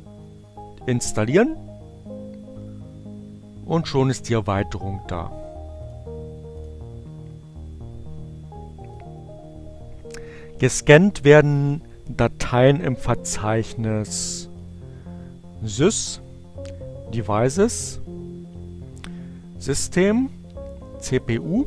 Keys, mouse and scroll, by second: 0.8 click, 3.4 click, 5.6 click, 6.1 click, 8.2 click, 14.9 click, 16.1 click, 18.0 click, 19.3 click, 21.2 click.